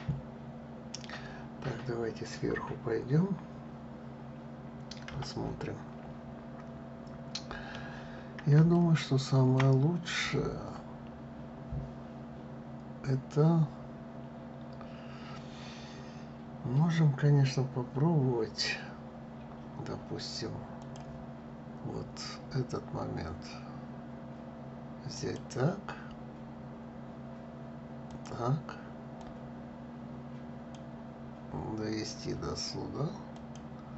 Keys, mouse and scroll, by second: 4.8 KP_7, 6.3-8.4 scroll up 2, 8.4-11.4 shift+middle drag, 20.5-23.5 drag.